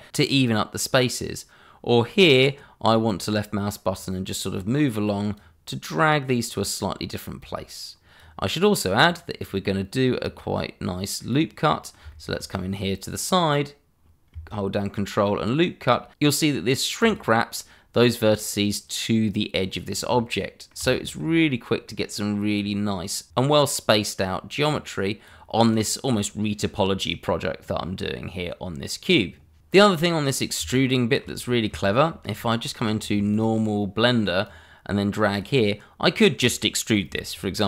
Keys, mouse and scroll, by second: 3.0 click, 6.6 click, 11.6 middle click, 12.3 shift+middle click, 12.4 scroll up 1, 12.8 middle click, 17.0 click, 19.7-20.1 scroll down 1, 20.1 middle click, 21.1 shift+middle click, 21.4 middle click, 22.5 click, 28.9-29.6 scroll down 1, 30.8 shift+middle click, 31.4 scroll up 1, 31.8 shift+middle click, 33.3 click.